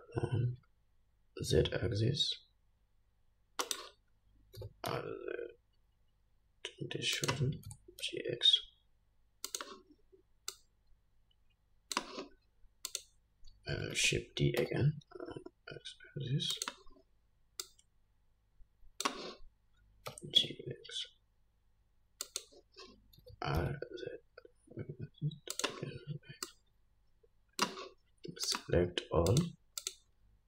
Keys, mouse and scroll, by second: 4.8 r, 7.9 g, 10.8-13.2 drag, 14.2 shift+d, 17.9-22.6 drag, 20.4 g, 23.5 r, 26.7-28.8 drag, 29.6 shift+click, 30.1 shift+click.